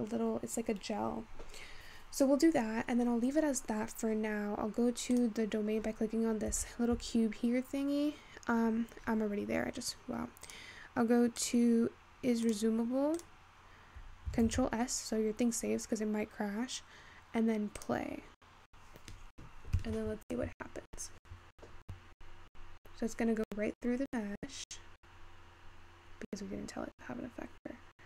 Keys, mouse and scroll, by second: 0.2-3.2 scroll down 1, 3.5-4.0 scroll down 1, 5.2 click, 6.0 scroll up 5, 6.3-8.9 scroll down 2, 8.9-9.6 scroll down 14, 9.6-10.0 scroll down 12, 10.8-11.9 drag, 13.0 click, 13.8 click, 14.6 ctrl+s, 15.7-16.0 scroll up 2, 18.3-21.4 drag.